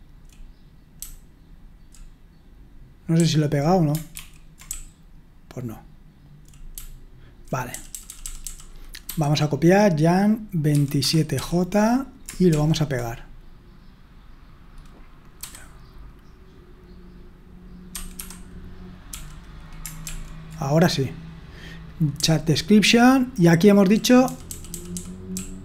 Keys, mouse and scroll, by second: 0.0-12.5 typing, 4.2 ctrl+d, 17.9-20.1 typing, 22.8-25.6 typing.